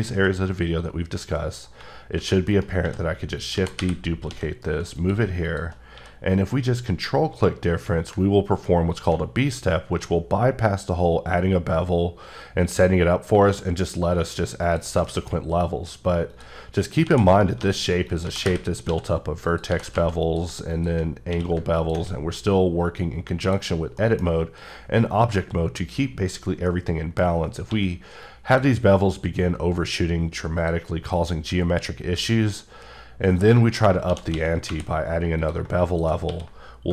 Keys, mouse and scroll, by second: 1.8 click, 2.2-4.3 typing, 2.5 right click, 3.4 click, 5.0 click, 5.4 shift+click, 5.9 q, 8.7 ctrl+Num_Lock, 8.9 ctrl+click, 14.6 click, 15.1 shift+middle click, 15.4-16.2 scroll up 1, 16.3 click, 17.0-20.0 typing, 17.3 right click, 18.1 click, 19.5 click, 20.2 click, 21.3 q, 21.7 ctrl+click, 23.7-24.0 scroll down 1, 24.0 middle click, 24.2-24.6 scroll up 2, 26.7 middle click, 27.2 scroll down 1, 27.3-27.7 scroll up 1, 27.7 q, 28.3 click, 30.6 click, 32.4-33.3 scroll down 2, 33.3 click, 33.8 scroll down 2, 34.1 shift+d, 34.3 x, 34.7 y, 35.4 click, 35.9 click, 36.2 q.